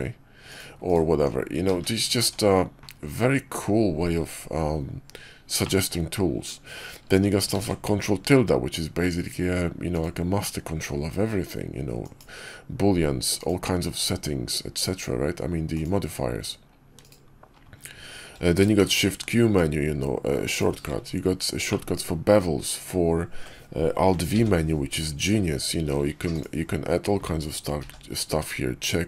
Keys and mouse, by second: 0.7 right click, 1.6 ctrl+z, 2.1 Tab, 5.5 middle click, 7.4 ctrl+`, 18.7 shift+q, 21.6 drag, 21.7-22.7 middle drag, 24.2 alt+v, 27.7 alt+v.